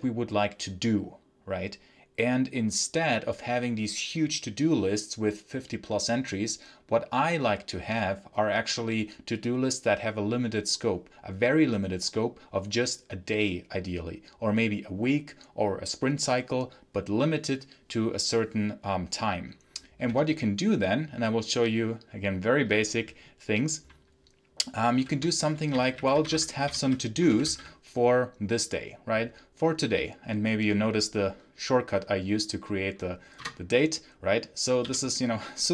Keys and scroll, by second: 19.9 v, 20.1 space, 24.8 ctrl+t, 25.3-27.9 typing, 33.4 Return, 34.7 i.